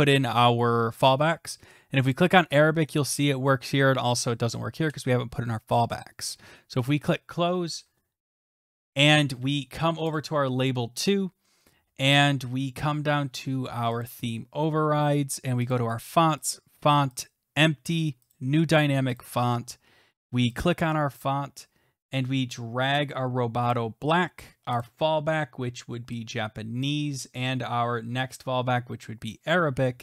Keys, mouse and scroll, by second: 10.2 click, 11.5 scroll down 1, 11.6 scroll, 11.9-12.4 scroll down 4, 14.2 click, 14.4 scroll down 2, 14.6-15.0 scroll, 15.7 click, 16.5 click, 17.2 click, 18.3 click, 19.2 click, 19.5 scroll, 20.6 click, 22.1 scroll, 23.7 click, 24.8 click, 26.7 scroll down 3, 26.8 click, 27.3-27.8 scroll, 29.3 click.